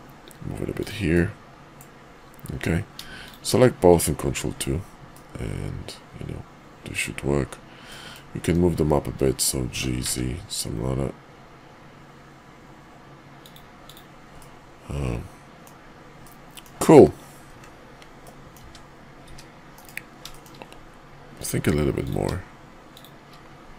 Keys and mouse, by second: 1.1-1.8 drag, 3.1 shift+click, 4.2 ctrl+2, 5.0-7.0 drag, 7.9 middle drag, 9.6 g, 13.8 click, 14.4-15.6 middle drag, 16.2 middle click, 18.2-18.5 middle drag, 19.2 `, 19.7 KP_5, 20.2 shift+middle click.